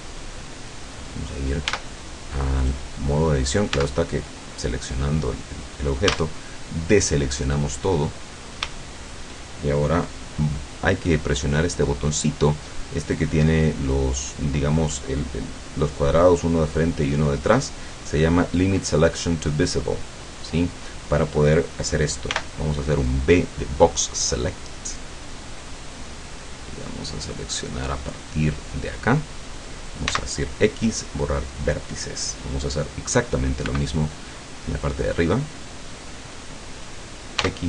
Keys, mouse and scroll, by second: 1.7 Tab, 2.7 right click, 3.8 Tab, 6.1 a, 7.4-7.7 scroll up 2, 8.3 scroll down 2, 20.1 click, 22.3 b, 27.5-29.1 drag, 30.1 x, 30.7 scroll down 2, 30.9 click, 31.2-33.7 scroll down 2, 33.7 b, 34.0-36.6 drag, 37.5 x.